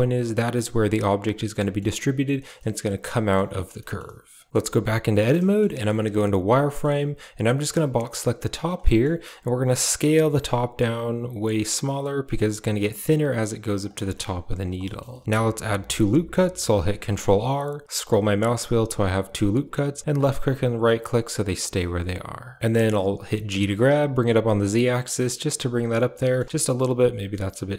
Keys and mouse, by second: 1.4 middle drag, 2.4 middle click, 3.0 middle drag, 3.4 shift+middle click, 3.7 middle click, 4.5 Tab, 5.0 middle click, 5.3 shift+middle click, 5.6 middle click, 6.0 z, 6.5 middle click, 6.8 a, 7.8 click, 8.7 shift+middle click, 10.0 s, 13.3 s, 14.0 shift+middle click, 14.3 s, 14.7 middle click, 15.0 shift+middle click, 16.8 ctrl+r, 21.0-22.5 middle drag, 23.2 middle click, 23.5 g, 25.8 z, 26.1 middle click, 26.4 g.